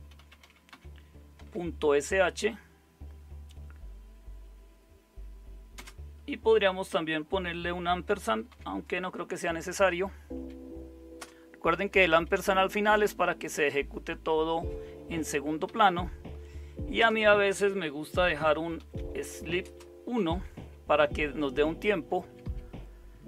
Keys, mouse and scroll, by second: 0.0-2.0 typing, 5.8 space, 8.5 shift+7, 10.3 Down, 11.2 Return, 11.9 Up, 12.4 Left, 15.7 Up, 17.0 Return, 17.8-20.8 typing, 22.3 Down, 22.5 Down.